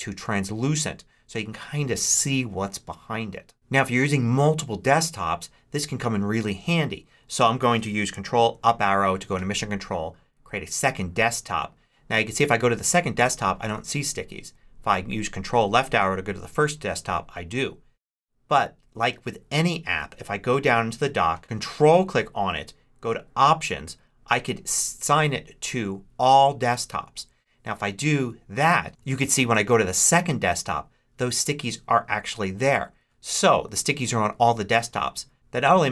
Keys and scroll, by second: 8.4 ctrl+Up, 15.5 ctrl+Left, 29.1 ctrl+Right, 33.5 ctrl+Left.